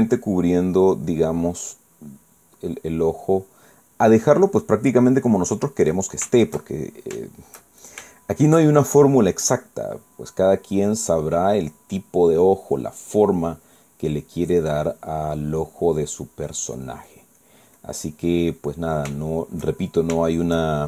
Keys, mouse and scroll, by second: 1.2 click, 2.1 click, 2.6 click, 3.1 click, 7.5 shift+middle click, 10.8 click, 12.0 click, 12.7 click, 13.3 click, 13.8 click, 14.3 click, 15.0 click, 15.4 click, 16.0-17.4 drag, 17.5 click, 18.2 click, 18.8 click, 19.7-20.8 middle drag.